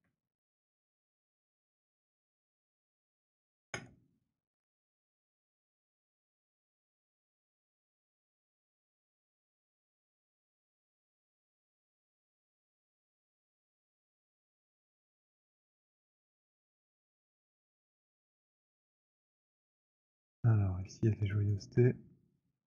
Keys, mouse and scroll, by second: 0.0 alt+d, 0.0 alt+right click, 0.0 alt+middle click, 0.0 w, 1.0 right click, 2.5 click, 2.7 click, 3.6 ctrl+BackSpace, 8.3 click, 8.5 click, 9.3 ctrl+BackSpace, 10.7 alt+middle click, 11.4 alt+click, 11.7 alt+click, 12.1 alt+right click, 13.9 middle click, 14.6 middle click, 15.8 click, 15.9 click, 16.8 ctrl+BackSpace, 18.2 alt+click, 18.6 alt+click, 19.3 alt+middle click, 19.7 alt+right click, 20.0 alt+click, 20.8 alt+middle click, 21.3 alt+right click.